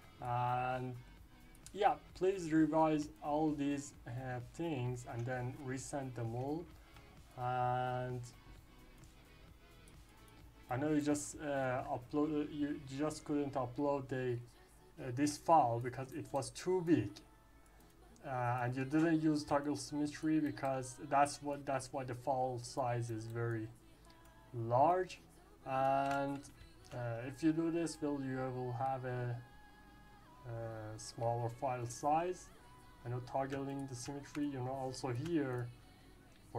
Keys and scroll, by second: 26.5 ctrl+s.